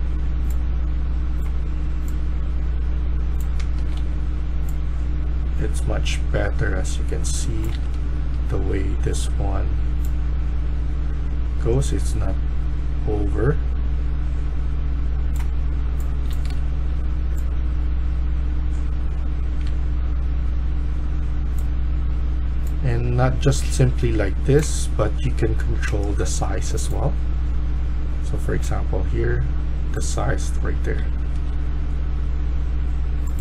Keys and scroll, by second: 3.2-4.4 typing, 7.7-8.3 d, 8.3 w, 15.9-17.0 typing, 19.4 typing, 30.4-31.4 typing.